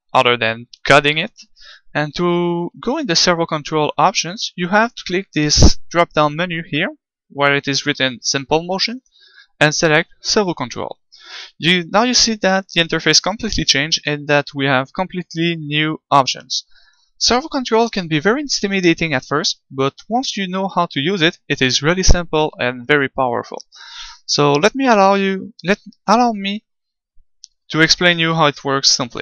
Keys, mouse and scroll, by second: 10.4-29.2 drag.